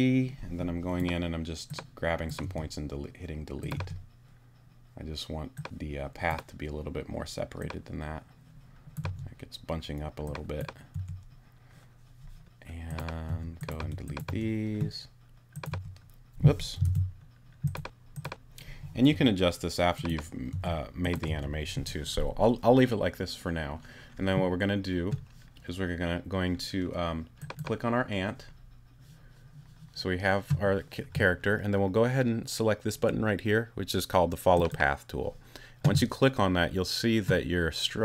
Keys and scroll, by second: 2.4 BackSpace, 3.7 BackSpace, 9.0 BackSpace, 10.9 BackSpace, 13.3 BackSpace, 15.7 BackSpace, 16.8 super+BackSpace, 17.9 super+z, 19.1 BackSpace, 20.5 BackSpace.